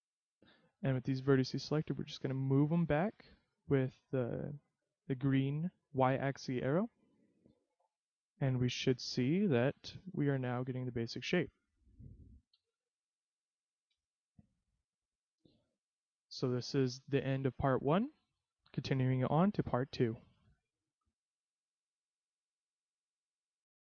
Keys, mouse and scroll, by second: 2.1 click, 6.6 middle click, 6.6-7.0 scroll down 2, 8.3 middle click, 8.9 z, 9.3 middle click, 12.6 KP_3, 13.9 z, 18.8 shift+middle click, 21.5 ctrl+p.